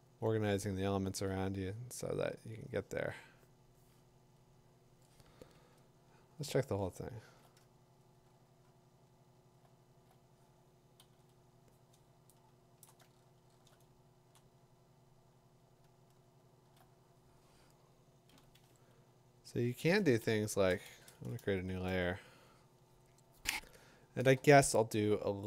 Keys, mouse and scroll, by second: 0.2 click, 0.5 2, 1.1 4, 4.2 ], 6.4-6.8 middle click, 7.6 Caps_Lock, 7.6 click, 8.2 alt+click, 8.4 click, 8.5 click, 8.5 click, 9.3 middle click, 10.0 middle click, 10.1 alt+click, 11.0 ctrl+h, 12.5 middle click, 12.8 click, 13.1 middle click, 13.5 middle click, 16.5 middle click, 16.6 middle click, 20.7 b, 20.9 shift+n.